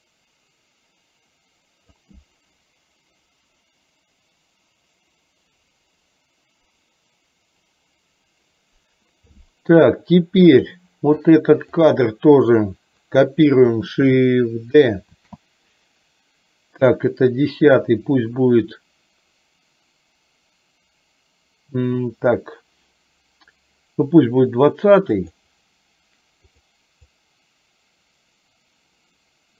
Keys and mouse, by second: 10.7 click, 11.6 click, 15.3 shift+d, 27.2-29.5 drag.